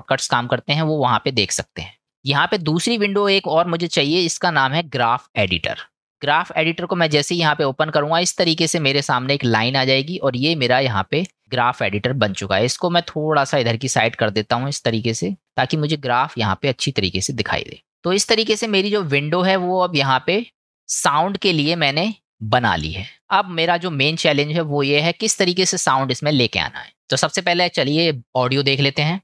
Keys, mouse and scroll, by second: 2.9-6.1 drag, 7.2-8.5 middle drag, 13.0-15.6 drag, 16.7-17.6 scroll, 19.2-20.0 shift+middle drag, 20.3 middle click, 21.0-21.9 middle drag, 22.7-23.5 middle drag, 25.3-25.8 middle drag.